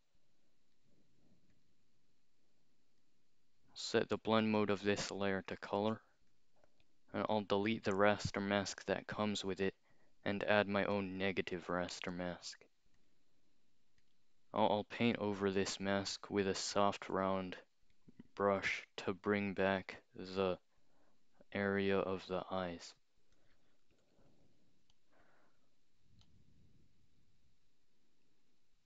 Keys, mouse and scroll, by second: 0.0 click, 1.5 click, 4.0 click, 5.5 click, 5.9-6.3 scroll up 2, 6.3 click, 6.8 right click, 9.0 click, 11.0 click, 13.0 click, 14.0 click, 15.2 click, 16.1 click, 19.3-23.3 drag, 23.9 ], 24.0 ], 24.2 ], 26.3-28.8 drag.